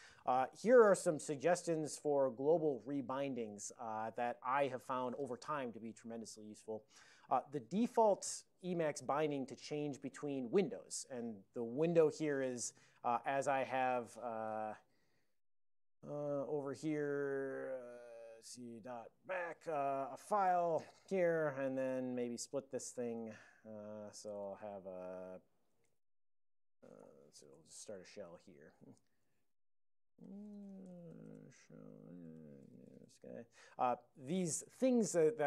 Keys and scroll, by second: 12.2 ctrl+x, 13.1 3, 14.3 alt+o, 14.7 ctrl+x, 15.0 b, 15.8 ctrl+g, 16.0 ctrl+g, 16.4-17.4 typing, 19.2 k, 21.7 ctrl+x, 21.9-24.7 typing, 22.5 alt+o, 25.9-28.6 typing, 27.1 ctrl+g, 29.2 alt+o, 30.2 alt+o, 30.5-33.5 typing, 32.0 Return, 32.3 alt+o.